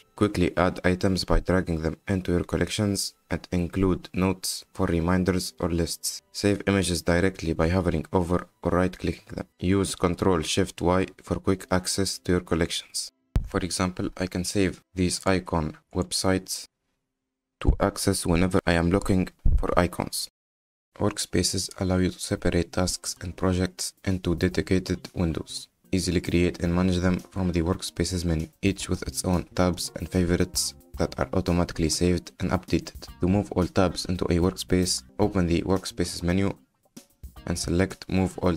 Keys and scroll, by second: 10.8 ctrl+shift+y, 33.0 F10.